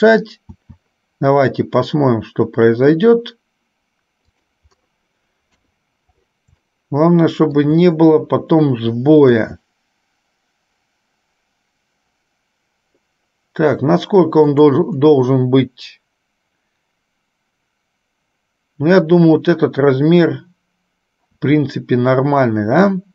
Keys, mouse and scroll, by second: 0.6 s, 5.8 KP_3, 6.9 shift+middle click, 9.5 s, 21.4 s.